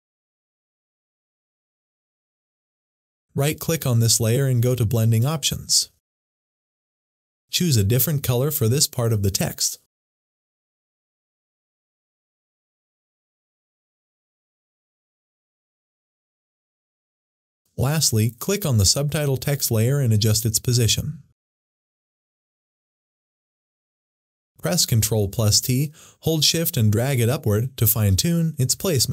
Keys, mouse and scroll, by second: 3.6 right click, 5.1 click, 7.5-9.1 drag, 10.9 click, 17.0-24.8 drag, 24.8 ctrl+t, 27.8 ctrl+shift+t, 28.1-29.1 shift+drag.